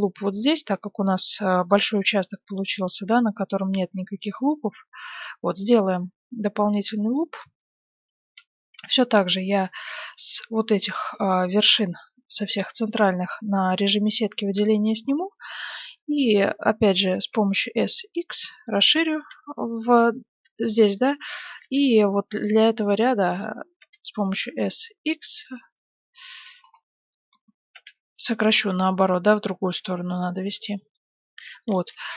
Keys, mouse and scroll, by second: 6.0-9.8 middle drag, 8.4 z, 9.6 b, 15.1-17.7 middle drag, 17.4 s, 19.1 a, 19.4 b, 20.1 middle click, 22.8 b, 23.2 click, 23.7 s, 25.5-29.0 middle drag, 27.6 s, 30.4-31.6 drag, 31.6 middle click, 32.0 Tab, 32.0 click.